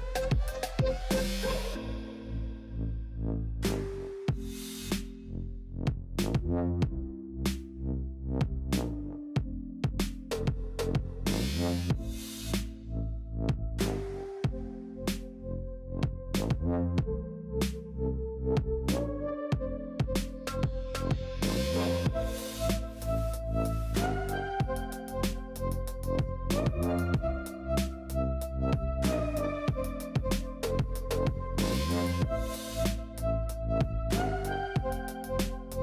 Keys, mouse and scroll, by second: 0.1 g, 1.4-2.3 scroll up 1, 2.3 g, 3.4 ctrl+l, 3.8-4.3 scroll down 6, 4.3 shift+d, 5.3-6.9 middle drag, 6.9 scroll up 2, 7.1 g, 8.4-9.2 middle drag, 9.2 scroll up 2, 9.4-11.2 middle drag, 11.2 scroll up 1, 11.4 shift+middle click, 12.4-15.3 typing, 13.1 alt+click, 14.8 ctrl+l, 18.3 KP_1, 18.7 click, 19.0 shift+middle click, 19.5 g, 20.9 shift+middle click, 21.1 alt+z, 21.5 click, 21.9 alt+z, 22.2 g, 23.9 ctrl+l, 24.2 scroll down 2, 24.3 middle click, 24.9 scroll up 1, 25.1 g, 26.7 shift+middle click, 26.9-27.3 scroll up 5, 27.3 shift+middle click, 28.1 g, 29.3 s, 31.4-31.8 scroll down 4, 31.8 shift+middle click, 32.7 scroll up 2, 32.8-34.2 middle drag, 34.2 g, 35.4 middle click.